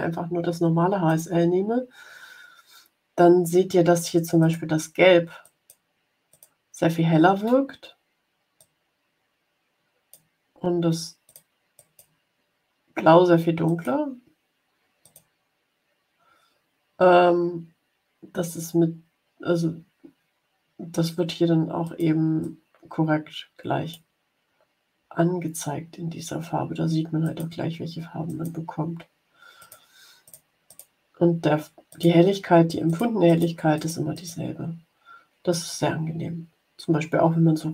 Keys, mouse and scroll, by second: 1.0 click, 4.3 click, 5.3 click, 6.2 click, 8.5-10.2 drag, 11.1 click, 11.6 click, 13.5 click, 14.9 click, 21.8 click, 22.4-24.1 drag, 27.1 click, 28.2 click, 29.5 click, 30.2 click, 30.6 click, 31.8 click, 32.8 click, 33.2-34.4 drag.